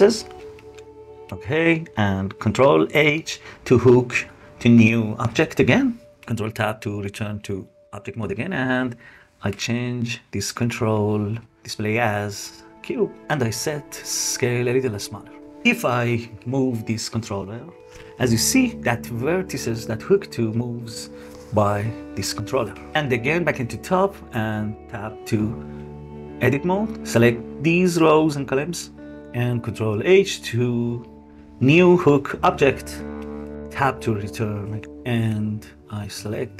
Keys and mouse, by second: 0.6 middle click, 2.8 ctrl+h, 6.2 Tab, 9.2-11.8 middle drag, 13.0-14.5 middle drag, 15.3 middle click, 15.9 g, 22.7 KP_7, 23.8 Tab, 24.4 click, 25.3 Tab, 25.7 click, 26.5 shift+click, 27.1 shift+click, 28.4 shift+click, 30.9 ctrl+h, 32.3 middle click, 33.7 Tab, 36.3 click.